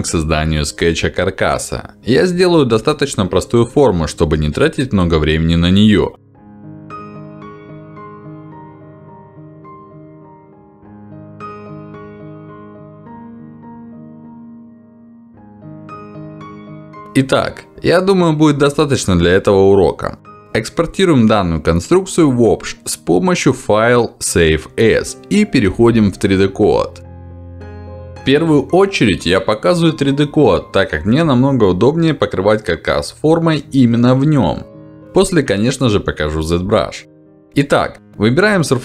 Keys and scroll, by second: 9.0 ctrl+z, 24.1 Escape.